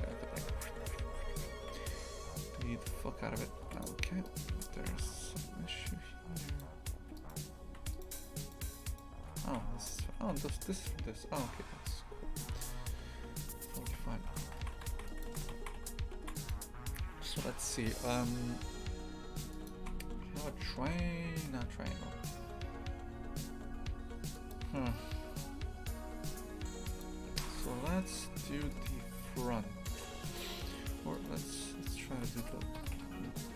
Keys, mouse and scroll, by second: 4.2 right click, 4.5 Tab, 4.8 shift+f, 6.9 3, 7.1 right click, 7.8 Tab, 7.9 right click, 8.4 right click, 8.8 right click, 9.2 Tab, 9.5 shift+f, 13.9 Tab, 14.6 shift+f, 19.6 click, 19.8 shift+f, 27.0 click, 27.3 shift+f, 31.1-32.1 right drag, 32.1 shift+d, 32.8 g.